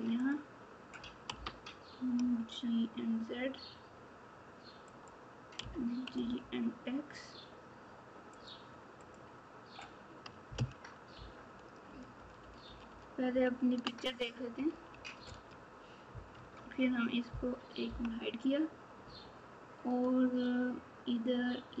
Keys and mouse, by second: 1.3 g, 5.6 g, 9.0 click, 11.1 ctrl+z, 12.1 ctrl+z, 12.4 ctrl+z, 12.8 ctrl+z, 13.3 ctrl+z, 14.6 alt+z, 16.3 Tab, 17.8 h.